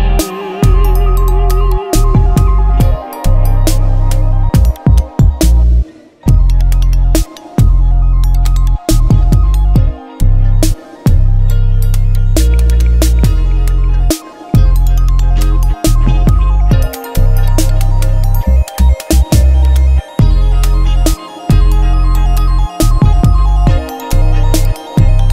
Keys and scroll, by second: 0.0-1.6 typing, 3.1-4.4 typing, 5.0 Return, 19.2 Return, 21.5-25.3 typing.